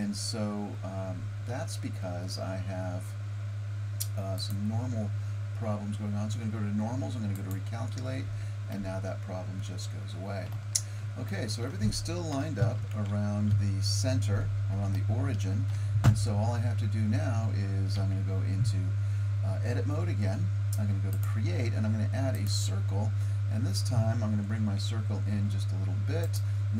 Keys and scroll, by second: 8.3 Tab, 12.6 KP_1, 13.5 KP_7, 18.0 Tab, 25.4 s.